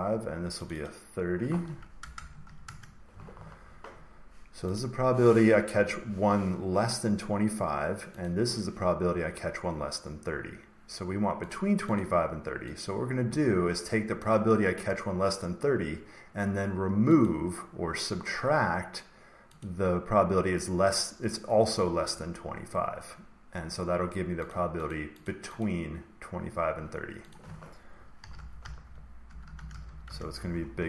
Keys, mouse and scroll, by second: 0.6 click, 0.8 click, 1.9-2.9 typing, 4.7-6.7 drag, 8.1-10.2 drag, 11.4-12.7 drag, 14.2 click, 17.2 click, 19.5 click, 24.4 click, 24.8 click, 25.2 click, 25.5 click, 27.2 click, 27.9-30.3 typing.